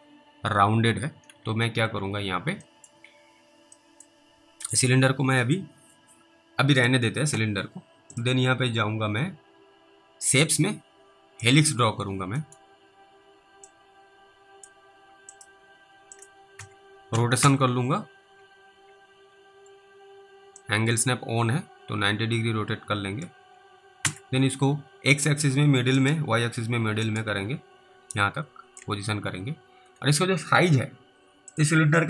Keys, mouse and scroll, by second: 1.3 alt+w, 1.8 alt+w, 2.8-3.2 scroll up 2, 2.9 middle click, 4.6 click, 11.9-12.3 scroll up 1, 12.5 middle click, 13.9 click, 15.4 click, 16.6-17.4 typing, 20.9 click, 26.0 right click, 28.0 click, 31.5 click.